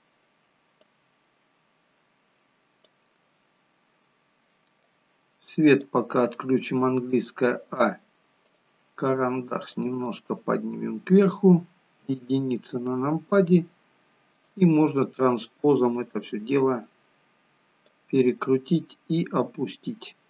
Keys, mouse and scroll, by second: 0.8 click, 3.7-5.8 scroll up 1, 5.8-6.9 scroll up 2, 8.5 click, 9.7 click, 12.0 KP_1, 13.0 scroll down 1, 14.3 click, 14.3-14.9 scroll down 2, 16.0 click.